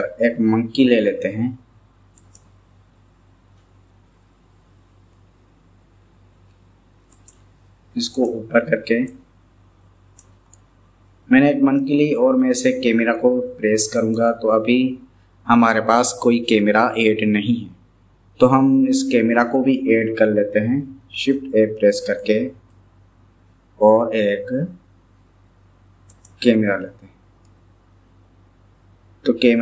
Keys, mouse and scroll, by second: 5.1 KP_3, 7.1 click, 8.2 click, 9.3 click, 10.5-11.9 middle drag, 14.1 click, 21.2 shift+a, 22.5 shift+a, 27.5-29.6 middle drag.